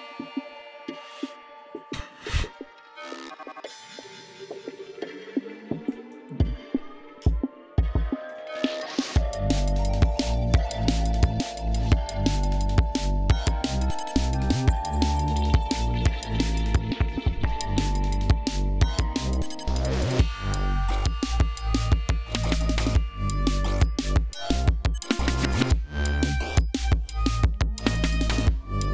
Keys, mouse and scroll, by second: 7.5-8.3 shift+drag, 8.5-10.0 shift+drag, 10.5-11.6 drag, 12.7-14.7 drag, 15.7 click, 16.9-18.3 drag, 19.4 click.